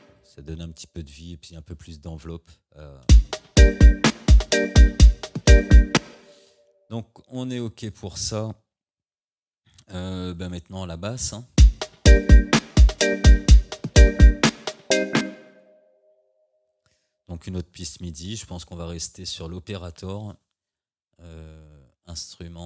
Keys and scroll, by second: 3.1 space, 6.0 space, 11.6 space, 15.3 space.